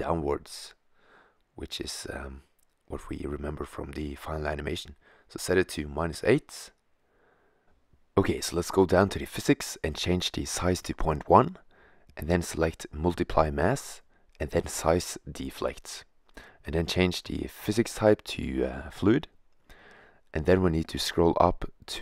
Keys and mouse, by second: 13.1-14.8 drag, 14.8 middle click, 16.5-17.4 drag, 18.2-20.4 middle drag, 20.4-21.4 middle drag.